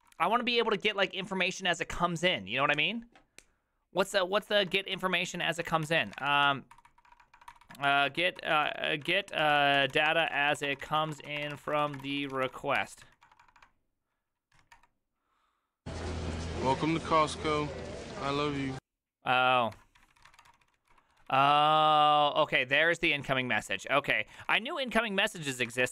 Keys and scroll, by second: 5.4-16.4 typing, 20.0-25.9 typing.